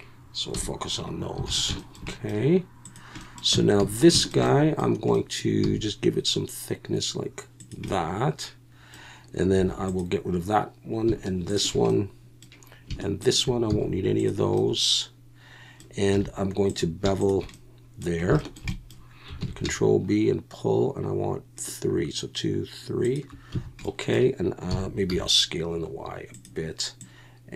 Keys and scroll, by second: 0.5 /, 1.5 alt+a, 3.5 Tab, 3.8 a, 5.6 e, 9.6 3, 13.7 x, 16.1 2, 19.4 ctrl+b, 23.5 a, 24.7 s, 25.1 y.